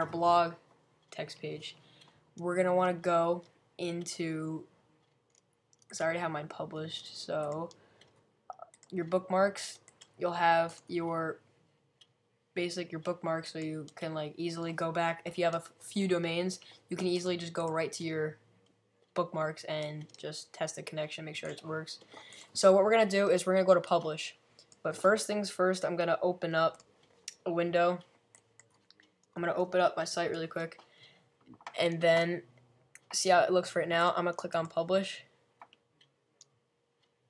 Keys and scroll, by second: 30.0-30.7 typing.